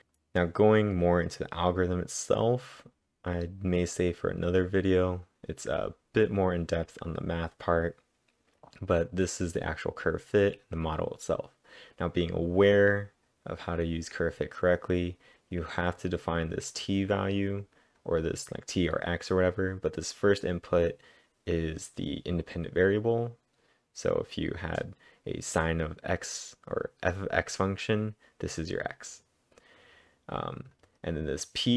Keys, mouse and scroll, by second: 0.0 scroll down 1, 8.6 click, 8.6-9.0 scroll down 1, 10.4 click, 12.4-13.4 scroll up 7, 12.6-13.3 typing, 13.4 scroll up 2, 14.4-15.6 scroll up 1, 16.7 click, 17.3 click, 18.0 click, 29.1 click.